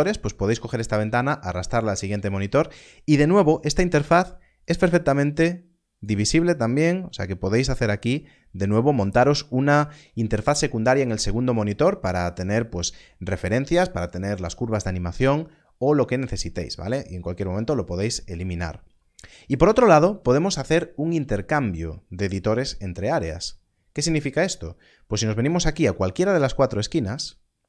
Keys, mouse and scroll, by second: 4.5 click, 17.0 click.